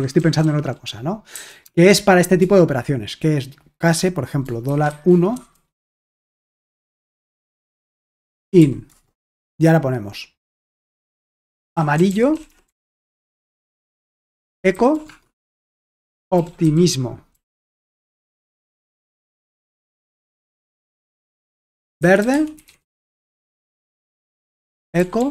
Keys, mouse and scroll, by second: 0.0-1.6 typing, 4.4-5.8 typing, 7.2-9.1 typing, 11.2-18.2 typing, 14.1 Return, 18.7 Return, 20.0-20.8 typing, 21.9-25.3 typing, 24.2 Return.